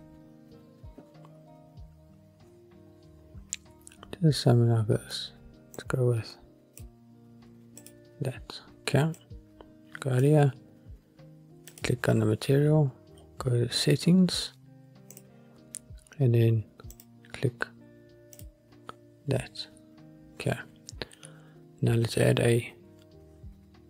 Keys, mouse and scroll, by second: 0.8-1.9 scroll down 1, 5.9 click, 7.9-10.4 drag, 11.8 click, 12.9-13.6 scroll down 4, 13.3 scroll up 1, 13.6-14.2 scroll down 2, 13.9 scroll up 1, 14.2-15.3 scroll down 1, 15.3 click, 15.7-16.8 scroll down 1, 16.8 scroll down 1, 17.1-18.6 drag, 20.0-22.1 scroll up 1.